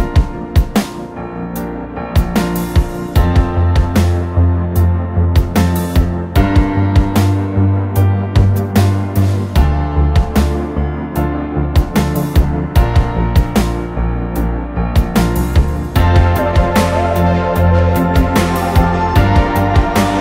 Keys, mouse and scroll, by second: 0.6 m, 3.6 middle click, 4.4 scroll down 1, 5.3 right click, 7.3 middle click, 8.6 right click, 9.6 scroll up 1, 10.8 shift+click, 11.1 right click, 14.1 right click, 15.7 middle click, 17.3 shift+click, 17.5 middle click, 17.9 shift+click, 18.9 shift+click, 19.2 right click.